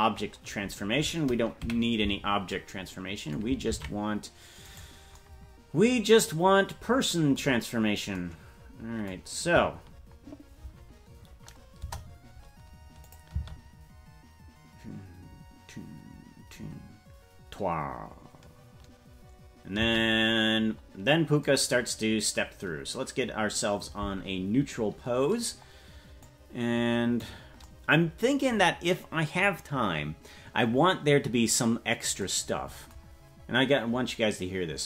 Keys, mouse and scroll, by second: 1.6 KP_Decimal, 3.8 ctrl+Tab, 4.8 right click, 7.6-8.1 scroll down 6, 11.8 KP_0, 13.0 click, 13.3 space, 19.8 space, 26.2-27.4 drag, 33.2-33.9 scroll up 3.